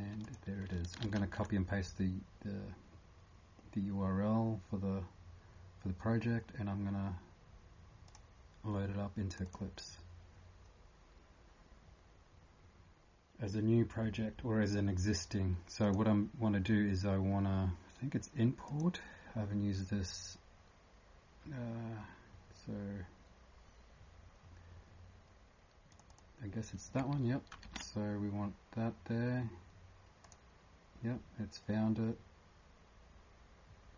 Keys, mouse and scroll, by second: 1.0 ctrl+c, 9.4 click, 18.7 click, 27.7 ctrl+v.